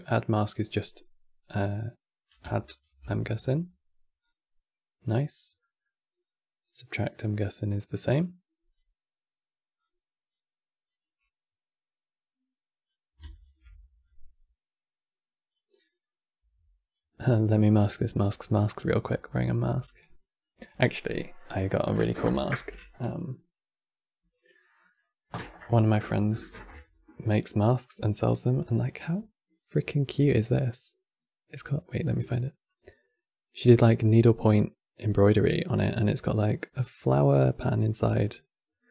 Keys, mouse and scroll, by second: 1.3 click, 2.5 ctrl+shift+click, 3.9-5.3 drag, 5.3-7.9 middle drag, 7.9 click, 9.5 click, 10.6-13.1 drag, 13.1 ctrl+shift+Left, 13.7-16.7 drag, 17.4 scroll down 2, 17.8-22.0 middle drag.